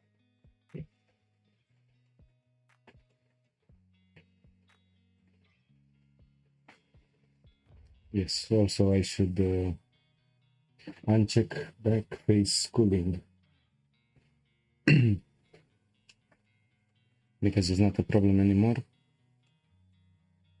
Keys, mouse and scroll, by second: 0.3 shift+click, 1.0 Delete, 2.1-5.1 shift+middle drag, 5.1-8.2 drag, 8.9-12.0 drag, 16.1-18.8 shift+middle drag, 18.8-19.5 scroll up 2, 19.5-20.6 shift+middle drag.